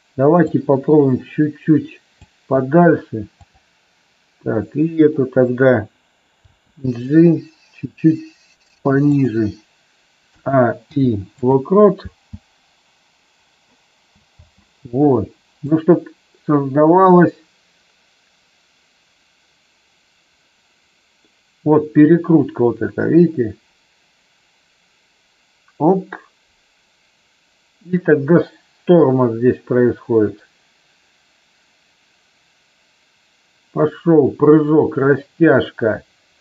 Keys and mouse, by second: 0.5-2.1 drag, 3.4 click, 6.4 g, 9.0 click, 10.3 a, 10.9 i, 12.0 space, 14.4 space, 15.6-36.4 drag.